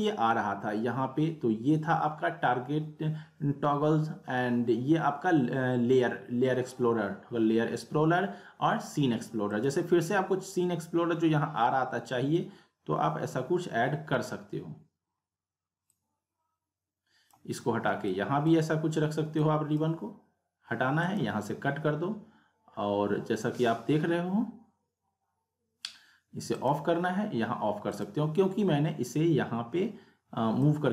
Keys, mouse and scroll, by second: 9.5 click, 16.0-16.5 drag, 26.6 click, 30.6-30.9 click.